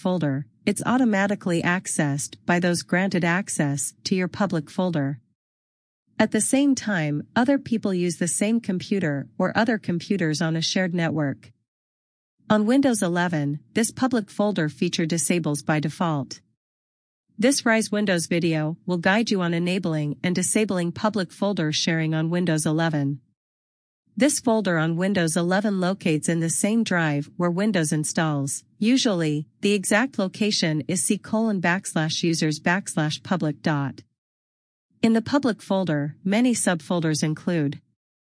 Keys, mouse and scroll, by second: 14.7 click.